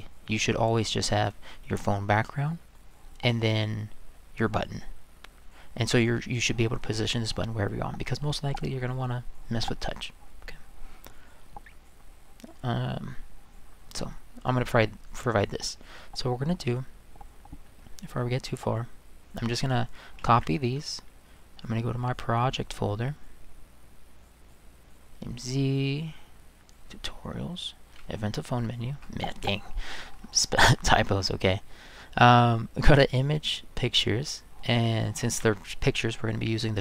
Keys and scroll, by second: 20.2 ctrl+c, 35.2 ctrl+v.